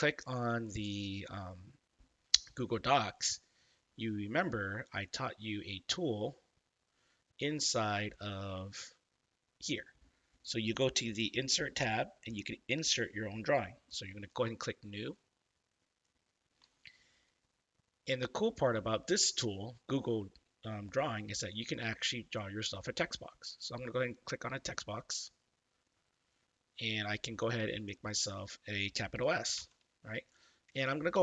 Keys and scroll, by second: 29.5 shift+s.